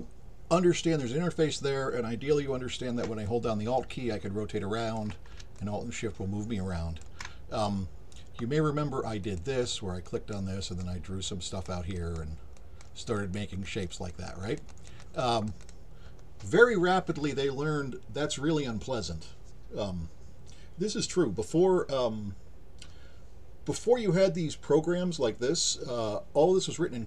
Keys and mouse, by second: 3.3-5.0 alt+drag, 5.6-7.0 alt+shift+drag, 9.2 click, 10.0 click, 10.6 click, 11.3 click, 12.0 click, 12.6 click, 13.2 click, 13.6 click, 14.1 click, 14.4 click, 14.7 click, 15.0 click, 15.3 click, 15.6 click.